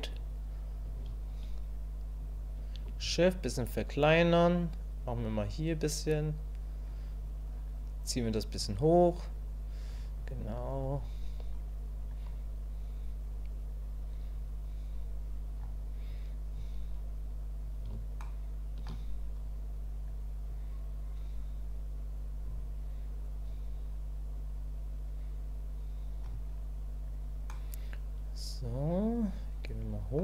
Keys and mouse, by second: 2.9-4.1 shift+drag, 5.1-6.9 drag, 8.0 click, 9.0 click, 10.2 click, 10.9 click, 11.5 click, 12.3-15.6 drag, 17.0 click, 18.2 shift+middle click, 19.4 click, 20.5-26.2 drag, 26.6 click, 27.5-30.2 middle drag.